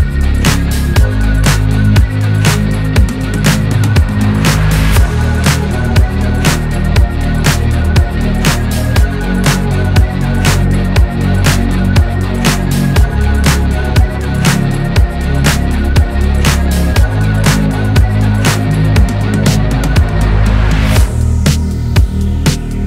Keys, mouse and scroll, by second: 0.6 scroll up 1, 0.7 middle click, 1.7 click, 2.1 s, 3.5 KP_3, 3.9 click, 4.2 Tab, 4.5 g, 5.9 click, 6.1 g, 8.1 scroll down 2, 8.3-8.8 scroll up 1, 8.8 click, 9.0 g, 10.2 click, 11.1 g, 11.4 click, 11.5 g, 13.0 Tab, 13.2 click, 13.3 scroll down 2, 13.6 scroll up 2, 13.8 click, 14.1 click, 14.7 ctrl+z, 14.9 ctrl+z, 15.4 Tab, 15.6 Tab, 15.7 click, 17.4 click, 18.5 Tab, 18.7 Tab, 18.9 click, 19.4 Tab, 20.0 g, 21.1 click.